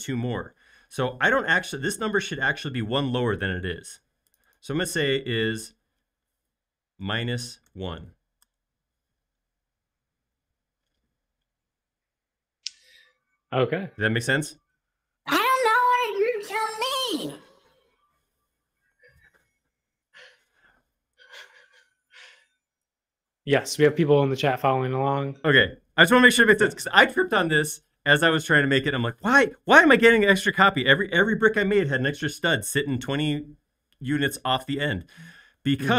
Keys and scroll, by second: 7.1-7.7 typing, 8.4 Return.